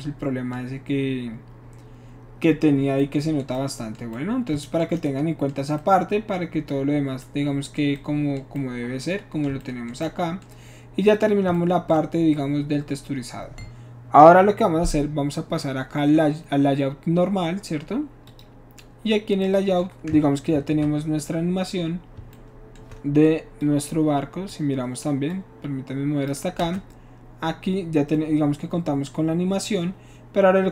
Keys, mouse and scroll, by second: 2.9 middle click, 11.2 shift+click, 18.3 click, 20.6 ctrl+s, 23.6-24.5 shift+drag, 25.3-26.3 drag, 26.7 space.